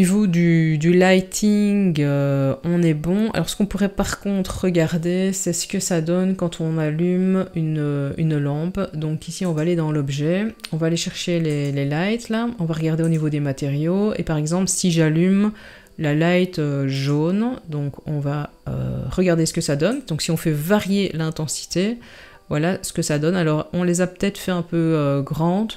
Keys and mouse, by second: 9.4 click, 11.5 click, 13.0 click, 16.9 click, 20.0-25.7 drag.